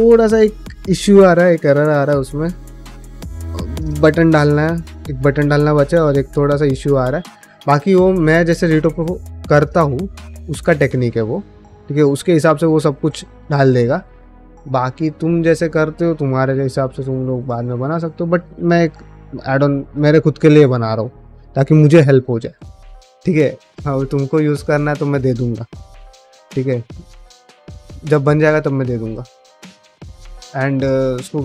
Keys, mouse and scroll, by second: 18.6 middle click, 19.6 shift+middle click, 19.9 middle click, 20.4 shift+middle click, 20.7 middle click, 23.1 middle click, 26.3 middle click, 27.2 click, 27.5 g, 28.8 click, 29.2 g, 29.8 middle click, 30.3 shift+middle click, 30.5 middle click.